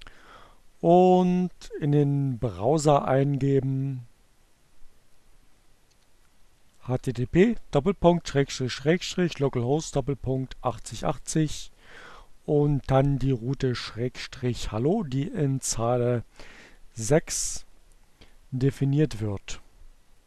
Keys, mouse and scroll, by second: 5.0 h, 6.0 Down, 8.2 BackSpace, 14.2 click, 14.8-16.1 drag, 18.4-20.2 drag.